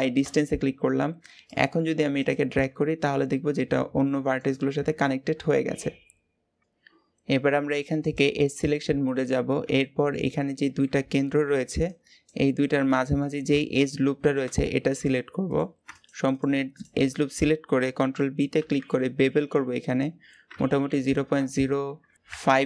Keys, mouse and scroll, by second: 1.2 click, 2.0 click, 2.3 g, 4.7-5.3 scroll down 2, 5.3-6.6 scroll up 3, 7.8 click, 9.0-10.2 middle drag, 10.2-10.6 scroll down 2, 10.6-14.3 middle drag, 15.2 click, 15.8 alt+shift+click, 16.2 alt+shift+click, 16.6 alt+shift+click, 16.9-18.4 scroll up 2, 18.4 ctrl+b.